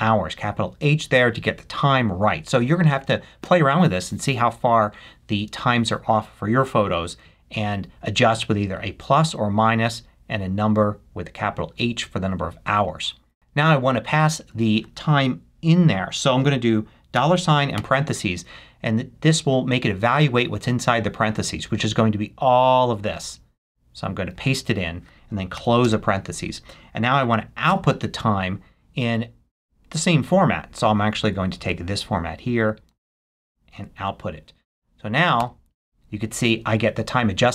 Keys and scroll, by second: 17.1 shift+4, 23.1 super+c, 24.3 super+v, 25.3 shift+super+v, 25.5 shift+0, 25.8 shift+space, 27.7 shift+=, 32.9 super+c, 35.4 Return.